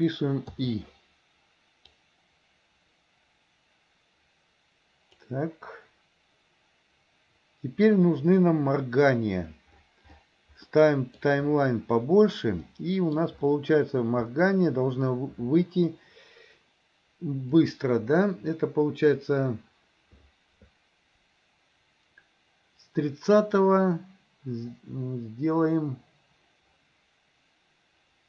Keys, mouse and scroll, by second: 2.1-5.4 drag, 10.8 middle click, 12.8 middle click, 17.7 click.